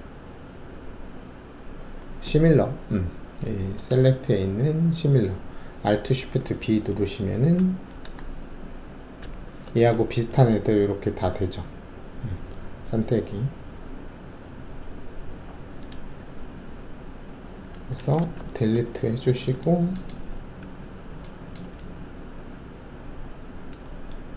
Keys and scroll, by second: 9.2 alt+shift+b, 18.3 ctrl+alt+`, 20.3 alt+`.